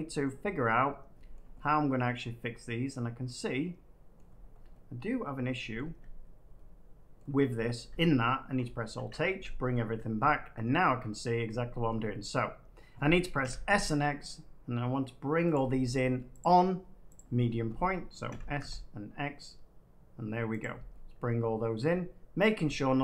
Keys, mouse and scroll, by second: 0.1 middle click, 1.1 middle click, 1.3 shift+middle click, 4.1 middle click, 4.3 scroll down 2, 4.4 scroll, 5.7 middle click, 5.8 Tab, 6.5 middle click, 7.7 middle click, 7.7 Tab, 8.9 alt+h, 9.7 middle click, 9.8 Tab, 10.7 middle click, 10.8 Tab, 11.8 shift+middle click, 12.2 middle click, 13.3 s, 13.6 x, 15.5 right click, 16.4-18.0 drag, 18.2 s, 18.5 x, 20.5-21.6 drag, 22.4-23.0 middle drag.